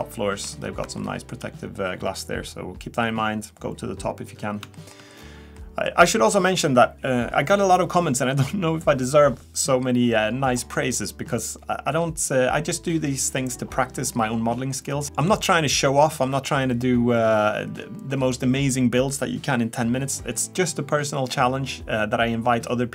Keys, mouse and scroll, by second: 0.9 scroll up 1, 1.1 shift+middle click, 4.6 scroll down 2, 4.8 shift+middle click, 5.4-5.8 scroll down 3, 5.8 middle click, 15.0 middle click.